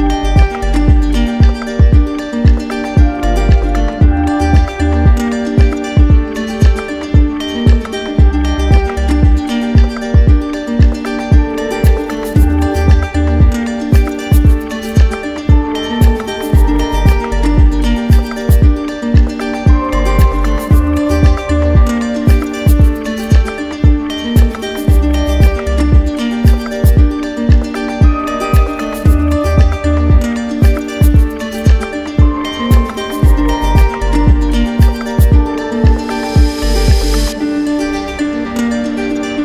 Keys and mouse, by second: 1.1 ctrl+click, 1.2 ctrl+z, 8.2 ctrl+click, 11.2 click, 14.4 click, 16.0 click, 16.3 ctrl+z, 21.6 click, 22.8 click, 29.8 click, 32.2 click, 34.0 click, 34.9 click, 37.3 click.